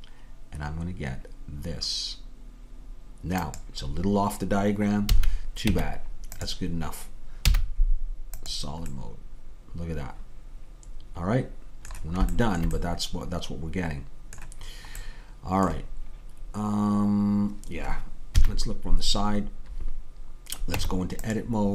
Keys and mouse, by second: 5.1 a, 5.7 Tab, 7.5 z, 12.4-16.2 middle drag, 18.3 KP_3, 20.8 Tab.